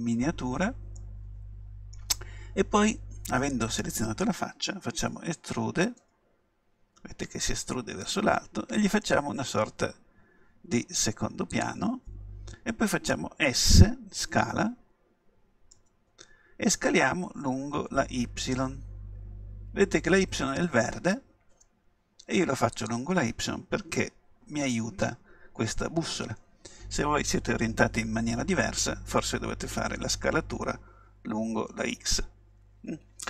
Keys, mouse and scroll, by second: 1.0-3.5 middle drag, 3.5-5.5 right drag, 6.0 e, 11.7-13.5 drag, 15.8 s, 22.9-24.8 drag.